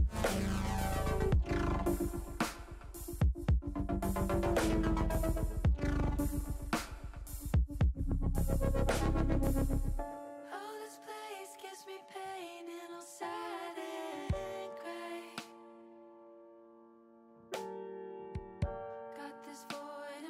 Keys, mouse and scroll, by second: 0.0 shift+middle click, 1.0 click, 2.1 r, 3.4 click, 4.0-5.2 drag, 5.6 s, 7.6 click, 10.0 s, 10.8 z, 16.3 click, 16.6 ctrl+z, 19.3 ctrl+z, 20.1 ctrl+z.